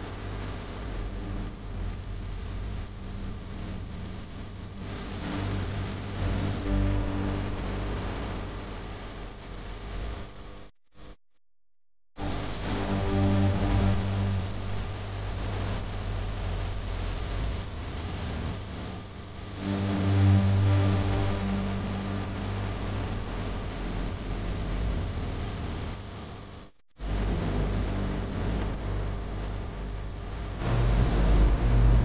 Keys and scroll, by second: 0.2 ctrl+z, 1.4 ctrl+z, 3.8 ctrl+z, 4.5 ctrl+z, 5.4 ctrl+z, 13.1 ctrl+z, 19.4 ctrl+z, 20.6 ctrl+z, 21.9 x, 24.8 -, 27.6 space.